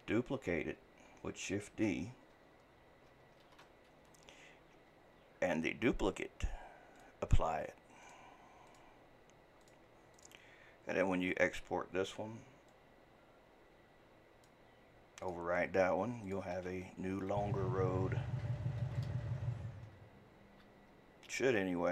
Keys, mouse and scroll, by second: 3.5 shift+d, 7.0 click, 8.0-15.7 drag.